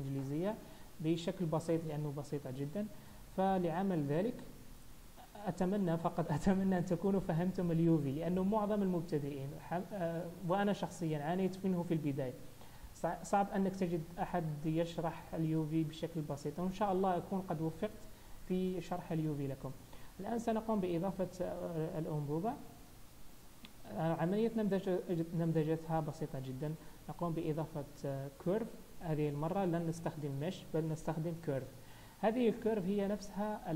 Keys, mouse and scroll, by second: 2.7-3.7 scroll down 3, 3.7-6.2 scroll down 1, 6.2-6.8 scroll up 2, 10.0 click, 19.9 scroll up 1, 22.4-23.2 scroll down 3, 23.2 scroll up 1, 24.2-25.1 scroll down 1, 28.1 shift+a.